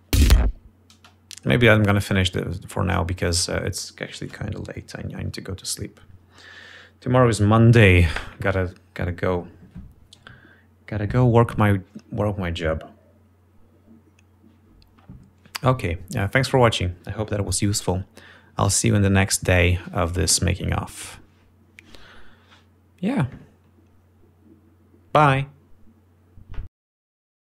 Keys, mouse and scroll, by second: 0.4 ctrl+scroll up 2, 0.8 ctrl+space, 1.6 space.